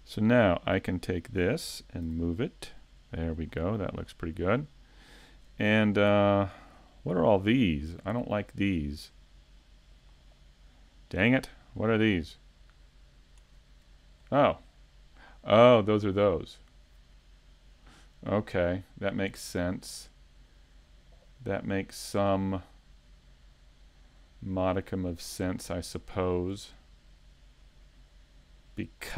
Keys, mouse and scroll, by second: 4.1 scroll down 1, 7.4 shift+middle click, 7.4 scroll up 6, 8.0 scroll down 2, 11.8 click, 11.8 right click, 12.9 middle click, 13.6-15.0 scroll up 7, 14.0 shift+middle click, 15.8 scroll up 5, 16.1 scroll down 1, 16.8 scroll down 3, 18.8 middle click, 21.2 middle click, 26.1 shift+middle click, 26.7 middle click, 27.6 scroll up 2.